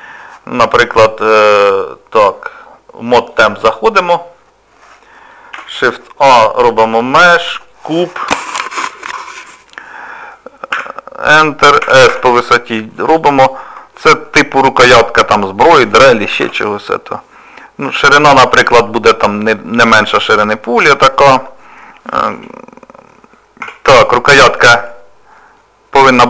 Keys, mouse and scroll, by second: 3.2 click, 5.5 shift+a, 10.7 Tab, 11.8 s, 13.3 middle click, 14.8 s, 20.1 middle click, 22.3 ctrl+r, 25.6 middle click.